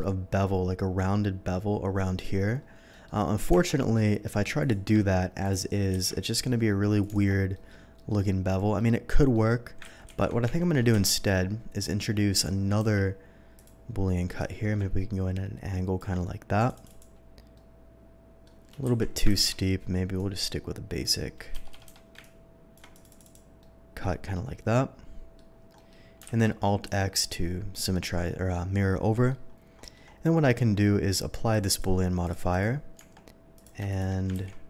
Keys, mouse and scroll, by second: 2.6 scroll up 1, 2.9 middle click, 3.5 Tab, 3.8 middle click, 4.6 click, 5.4 ctrl+click, 5.9 ctrl+b, 7.0 click, 7.1 Tab, 7.5 middle click, 7.9 middle click, 8.3-8.7 scroll down 1, 8.7-9.3 middle drag, 9.9 ctrl+z, 10.1 ctrl+z, 10.5 Tab, 10.9 KP_3, 12.7 d, 13.5 click, 14.3-15.9 drag, 16.6 ctrl+click, 16.7 ctrl+click, 17.5-18.4 ctrl+middle drag, 18.9 KP_3, 19.2 ctrl+z, 19.2 KP_3, 20.1-21.0 drag, 21.5 Escape, 21.7 Escape, 22.2-22.7 ctrl+drag, 22.9 ctrl+click, 23.1 ctrl+click, 23.2 ctrl+click, 23.6-25.3 middle drag, 25.7 middle click, 26.2 alt+x, 26.8 click, 27.1-28.5 middle drag, 29.1 middle drag, 29.8 middle drag, 30.0-31.5 scroll up 1, 31.5 click, 31.7 click, 32.2 click, 32.5 click, 33.0 Tab, 33.5 click, 33.9 shift+click, 34.3 ctrl+b.